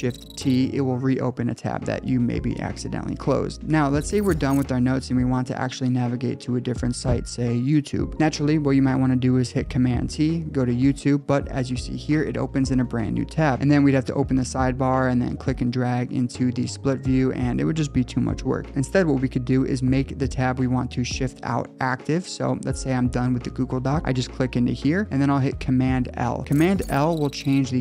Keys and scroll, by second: 0.2 shift+super+t, 8.1 super+t, 10.3 Return, 10.5 alt+super+Right, 13.6 alt+super+Right, 20.4 super+s, 21.9 super+s, 25.5 super+l.